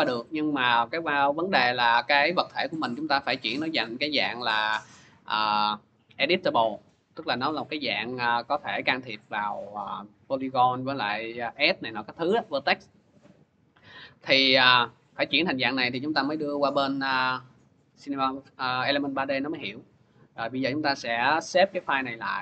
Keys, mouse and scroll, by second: 1.3-2.7 scroll down 7, 2.7 right click, 4.4 middle click, 5.6 click, 13.2-14.2 scroll, 14.2-15.1 scroll, 15.1-17.1 scroll, 19.7 click, 20.9 click, 22.2 click.